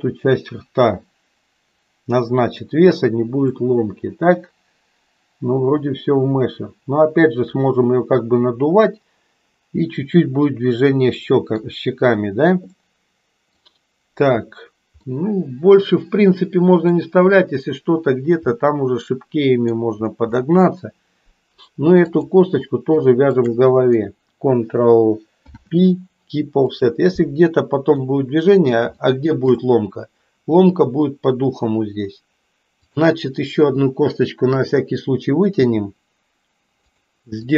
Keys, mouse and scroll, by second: 3.5-11.5 middle drag, 12.7 middle click, 15.3-16.9 middle drag, 18.5-19.8 middle drag, 20.5-21.8 middle drag, 22.2 click, 23.3 shift+click, 25.4 ctrl+p, 28.0 middle click, 29.0 shift+middle click, 32.8 click, 35.7 e.